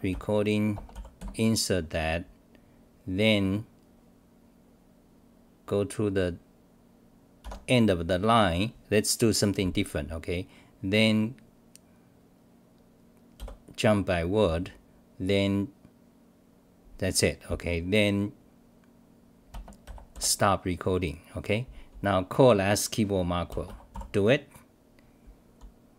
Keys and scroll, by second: 0.1 v, 1.2 space, 7.4 s, 13.3 v, 20.2 Delete, 23.7-24.4 typing.